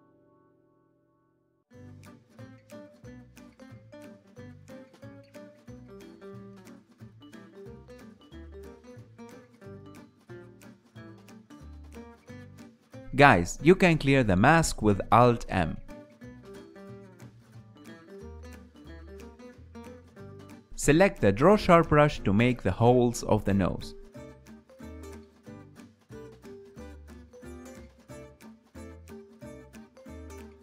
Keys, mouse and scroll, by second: 3.2-4.2 middle drag, 4.2-7.6 drag, 7.6 f, 8.3-11.0 drag, 11.0-13.3 middle drag, 13.3-15.0 drag, 15.0 ctrl+middle click, 15.7 alt+m, 16.1-17.5 middle drag, 17.5 KP_1, 18.3-20.7 ctrl+middle drag, 20.7 click, 20.9 shift+middle click, 21.4-23.6 drag, 23.6 f, 25.0-30.6 drag.